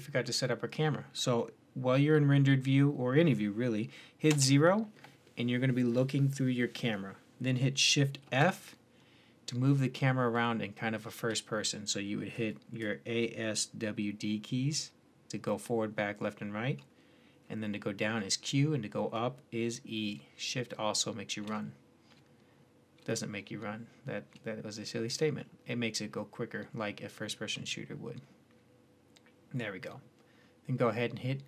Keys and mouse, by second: 0.0 drag, 4.1 KP_0, 8.0 shift+f, 25.2 click, 25.9-29.4 middle drag, 31.4 click.